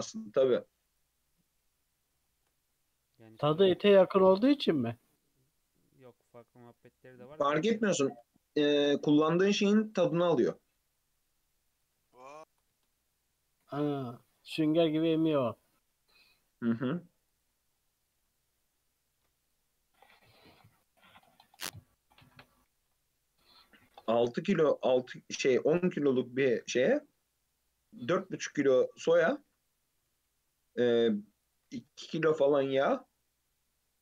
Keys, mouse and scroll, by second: 0.8 click, 1.3 Tab, 1.6 alt+z, 2.2-2.7 shift+middle drag, 2.7-3.1 scroll up 1, 3.1 1, 3.3 click, 4.1 g, 6.5 3, 6.7 click, 8.0 shift+middle drag, 8.3-8.7 scroll up 2, 8.7 e, 10.1 g, 12.0 s, 13.7 e, 15.4 g, 17.7-18.2 scroll down 4, 18.2 Tab, 18.7 Tab, 18.7-19.2 scroll up 2, 19.2 ctrl+r, 21.6 scroll down 2, 21.7-22.8 middle drag, 22.8 ctrl+z, 23.3-24.4 middle drag, 24.4 ctrl+r, 26.4 Tab, 26.5-27.2 scroll down 1, 27.2-27.6 scroll down 4, 27.6-29.2 middle drag, 29.2 Tab, 29.5 Tab, 30.4 scroll down 1, 30.6-31.4 middle drag, 31.4 click, 32.2 click, 33.9 click.